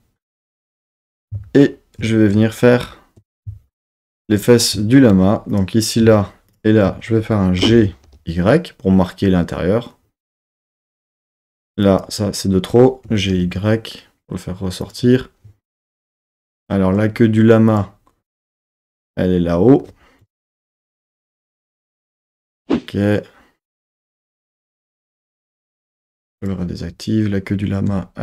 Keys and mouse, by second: 5.1 2, 5.5 click, 6.5 shift+click, 7.6 g, 8.1 y, 10.9 click, 11.5 1, 11.9 click, 13.1 g, 13.3 y, 14.8 click, 17.7 click, 20.2 KP_1, 20.7 KP_3, 21.0 z, 22.0 z, 26.4 click.